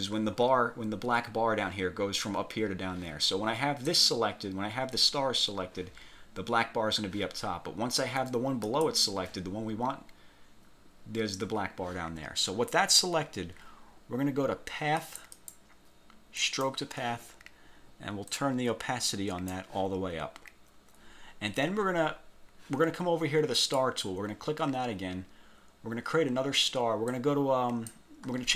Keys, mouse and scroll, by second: 4.0 click, 8.8 alt+click, 15.1 click, 16.5 click, 18.4-19.8 drag, 21.4-21.8 scroll down 1, 21.9-22.6 scroll up 4, 23.7 click, 27.2 click.